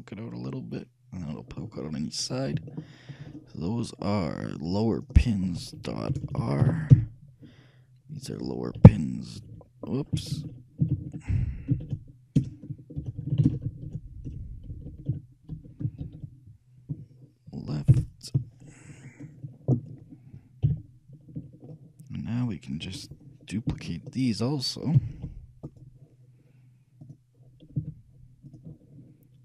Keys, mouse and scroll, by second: 1.8-3.0 middle drag, 5.1-7.2 shift+drag, 6.4 BackSpace, 6.5 BackSpace, 8.2-10.3 drag, 20.8 KP_3, 21.8-23.5 middle drag, 25.1 shift+d, 27.2-28.8 drag, 27.9 z.